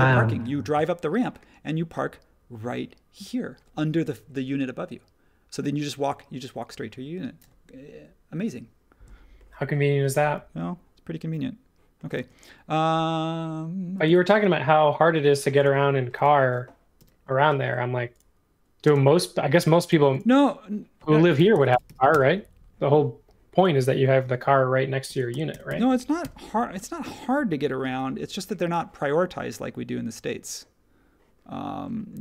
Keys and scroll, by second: 12.1 space, 15.3 space, 16.9 m, 18.8 space, 19.5 m, 21.1-22.3 typing, 24.1-27.0 typing, 26.2 Return, 27.8 super+1.